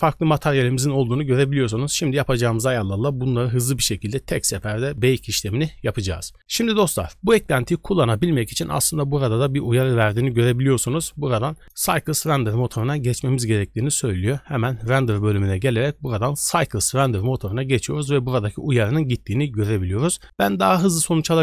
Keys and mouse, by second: 9.5 click, 9.8 click, 14.7 click, 15.7-16.8 drag.